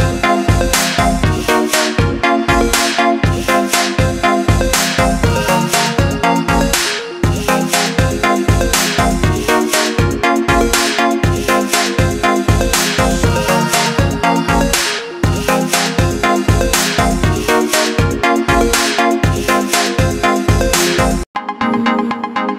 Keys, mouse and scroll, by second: 3.5 click, 12.4 alt+click, 13.6 alt+click, 15.8 click, 19.8-20.4 scroll up 2, 22.1 click.